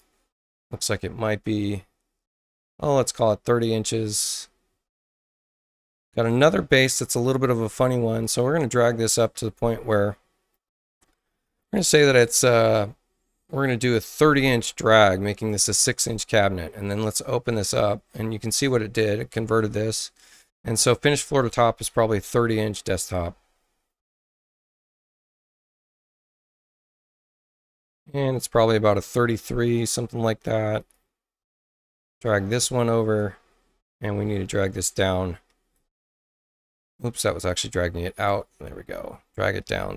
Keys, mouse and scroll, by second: 1.0-3.6 drag, 5.0 click, 6.2 click, 7.2 click, 8.3-9.5 drag, 9.3 Return, 14.3-15.2 typing, 15.4 Return, 21.4 click, 22.0-22.9 typing, 26.6 click, 27.1 space, 27.5 click, 28.3-29.7 drag, 30.7 click, 32.0-33.1 drag, 34.7 click, 35.4 Return, 37.0 click, 37.6 click, 38.9 click, 39.6 Return.